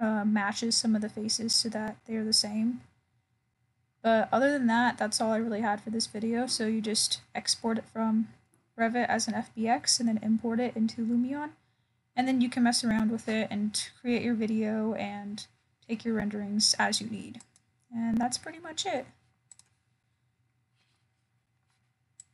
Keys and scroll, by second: 0.5 ctrl+alt+o, 19.7 ctrl+alt+o.